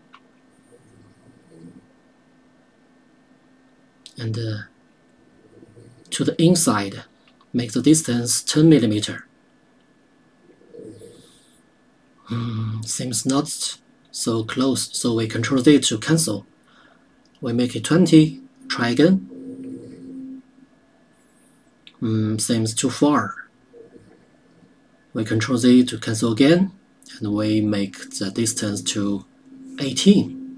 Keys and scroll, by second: 14.1 ctrl+z, 19.1 KP_0, 26.6 ctrl+z.